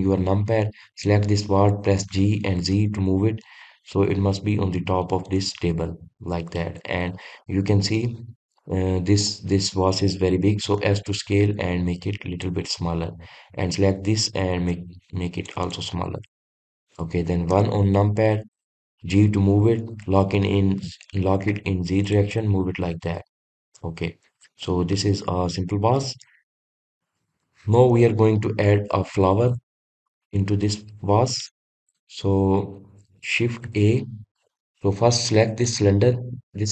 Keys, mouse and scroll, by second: 0.4 KP_1, 1.6 drag, 5.9 click, 6.4-7.7 middle drag, 7.7 click, 8.9-9.9 scroll up 1, 9.9 click, 13.3 click, 13.7 click, 15.3 s, 16.4 click, 16.6 scroll up 1, 16.7-18.2 middle drag, 18.2 KP_1, 19.5 drag, 23.1 drag, 23.4-24.5 middle drag, 24.5-24.9 scroll up 1, 24.9-25.4 scroll down 1, 25.4-27.0 middle drag, 27.0-27.5 scroll down 1, 27.5-29.0 scroll up 2, 29.0-29.5 scroll down 1, 29.5-30.7 middle drag, 30.7-31.6 scroll up 2, 31.6-34.4 shift+middle drag, 34.4 shift+a, 35.2 drag, 36.4 click.